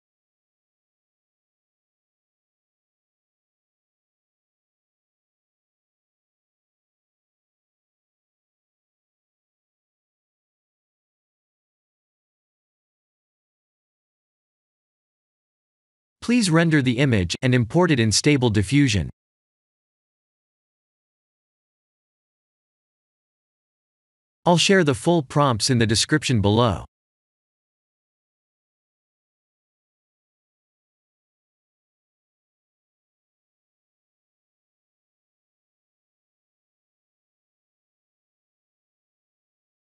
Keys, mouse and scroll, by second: 6.4 click, 8.5 click, 10.6 shift+d, 12.5 click, 13.0 x, 14.3 click, 14.8 ctrl+3, 15.3 right click, 16.1 click, 20.3 ctrl+s, 20.9 F12.